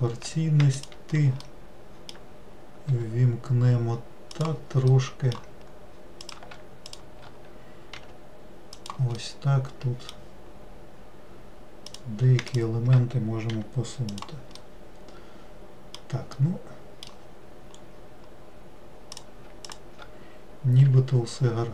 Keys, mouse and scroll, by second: 0.0 click, 0.9 shift+click, 1.6-3.1 middle drag, 3.1 g, 5.1-6.4 middle drag, 6.4 click, 7.0 shift+click, 8.1 g, 9.4-12.1 middle drag, 12.1 click, 12.7 shift+click, 13.7 g, 14.7-17.9 middle drag, 17.9-19.3 scroll up 2, 19.3 click, 19.8 shift+click, 21.1 g.